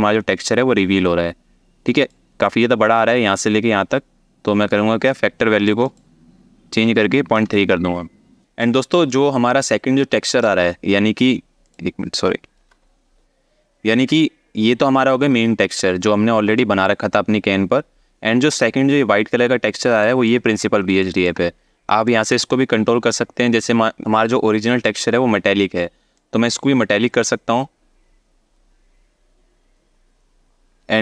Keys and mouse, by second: 4.3 click, 5.5 click, 8.9 shift+click, 11.3 click, 16.2 alt+shift+middle click, 19.8 alt+shift+middle click, 20.8 alt+shift+middle click, 21.8 alt+shift+middle click, 25.8-26.8 drag.